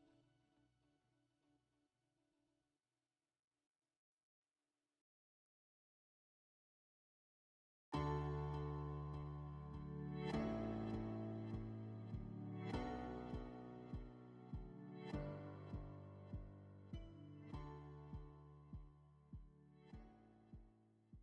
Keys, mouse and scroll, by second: 0.7 click, 2.2 click, 4.1 click, 5.8 click.